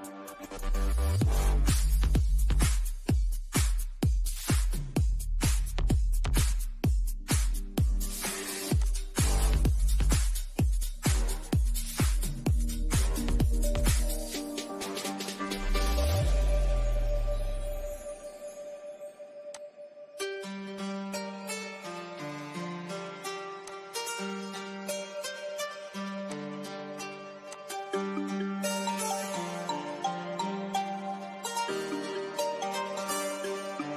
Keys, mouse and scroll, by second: 0.4 scroll up 1, 1.5-5.2 shift+middle drag, 5.2 click, 10.0 click, 10.7-11.1 scroll up 1, 12.8 click, 15.0 click, 18.5 click, 20.5 Up, 22.6 click, 26.0 scroll down 1, 26.4 click, 26.8 scroll down 1, 27.7-30.5 shift+middle drag, 30.5 scroll up 1, 31.0-33.4 middle drag, 33.4 scroll down 1.